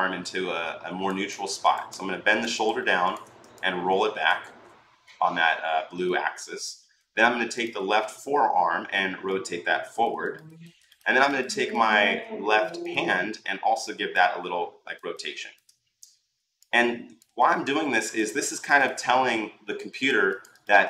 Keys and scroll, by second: 4.2 ctrl+z.